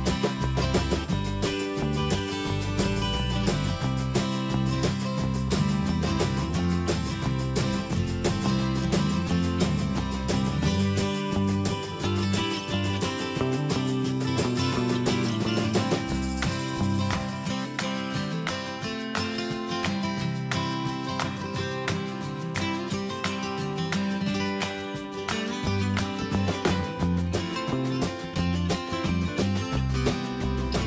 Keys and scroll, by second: 4.9 ctrl+j, 6.8 ctrl+[, 8.2 alt+BackSpace, 27.3 ctrl+j, 28.0 ctrl+[, 30.5 alt+BackSpace.